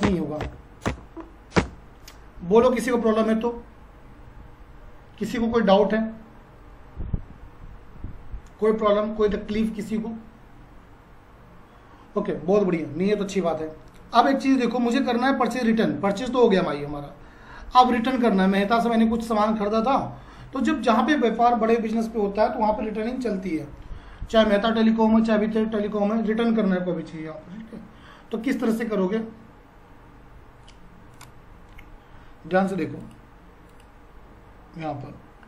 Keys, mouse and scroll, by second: 15.5 click, 31.1 click.